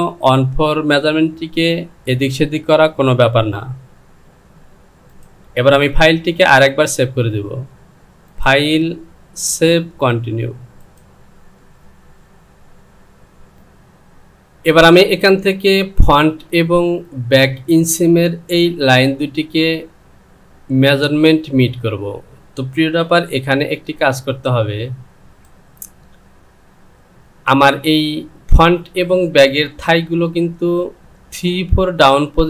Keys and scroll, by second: 23.6 Return.